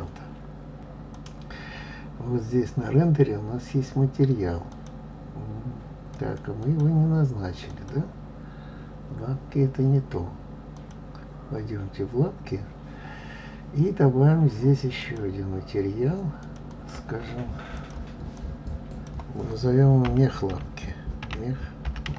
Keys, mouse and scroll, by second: 5.6 click, 7.5-8.8 drag, 11.7 click, 15.9-16.7 drag, 17.3 click, 18.7-21.7 drag.